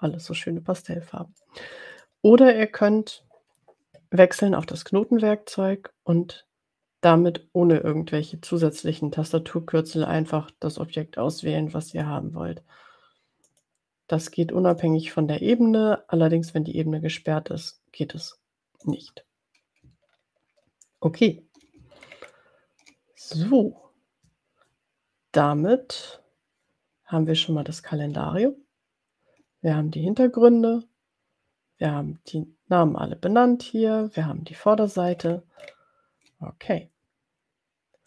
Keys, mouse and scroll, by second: 1.4 middle click, 4.6 click, 9.9 click, 11.9 click, 13.7 click, 14.8 click, 18.8 click, 20.0-20.4 ctrl+scroll down 2, 20.8 ctrl+scroll down 2, 21.9-22.9 ctrl+scroll up 2, 27.6-28.5 ctrl+scroll down 3, 35.4-36.3 ctrl+scroll up 4.